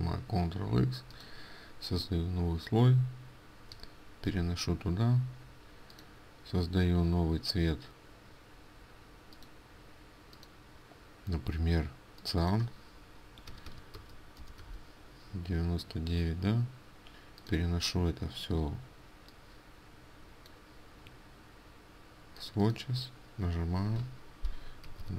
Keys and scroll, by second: 4.4 ctrl+f, 14.1 Tab, 14.8 Tab.